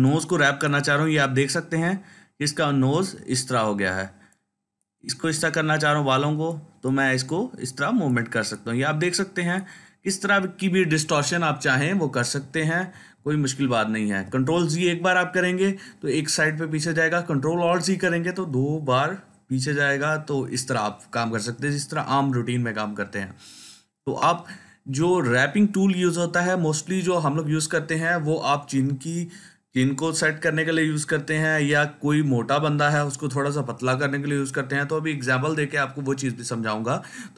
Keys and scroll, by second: 3.5 ctrl+z, 5.5 ctrl+z, 10.9 ctrl+z, 12.9 ctrl+alt+z, 13.3 ctrl+alt+z.